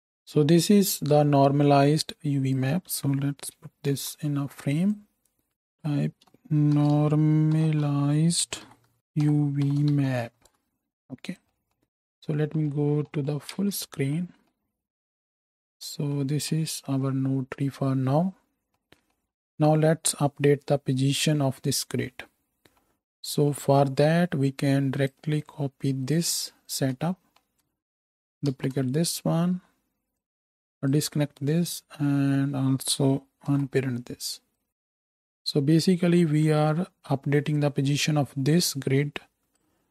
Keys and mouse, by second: 3.9 ctrl+j, 5.7 F2, 9.6-11.4 shift+middle drag, 11.4 click, 11.8 ctrl+space, 12.0 ctrl+space, 13.8 ctrl+space, 22.8-25.0 middle drag, 25.0 shift+click, 25.4 shift+middle click, 25.5-26.0 shift+drag, 26.0 shift+middle click, 26.1-26.6 shift+drag, 26.6 shift+middle click, 26.7-33.6 shift+drag, 28.5 ctrl+shift+d, 30.3 ctrl+z, 33.5 alt+p, 33.6-38.7 right drag, 38.7-39.9 middle drag.